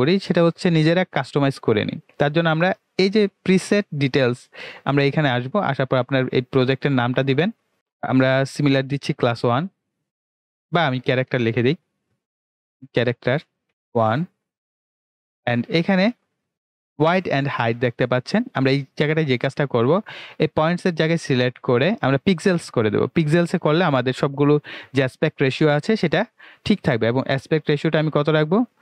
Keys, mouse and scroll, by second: 5.5-8.6 drag, 10.8 BackSpace, 12.6 typing, 21.1 click, 27.3-28.8 drag.